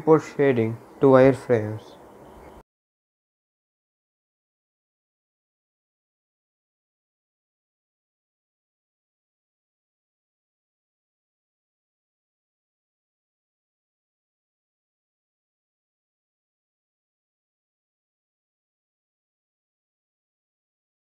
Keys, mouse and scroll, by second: 0.9 click, 1.4-1.9 scroll up 1, 2.4-5.7 drag, 5.7 e, 7.4-10.4 drag, 10.4 s, 11.4-14.6 drag, 14.6 s, 15.4 click, 16.2 r, 19.7-21.1 drag.